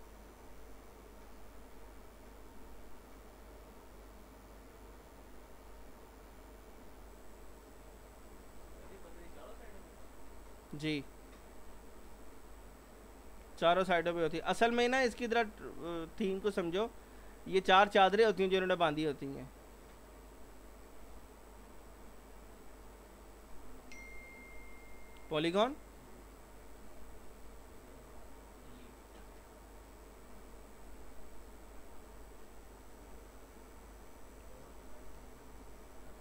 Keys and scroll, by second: 3.0 alt+r.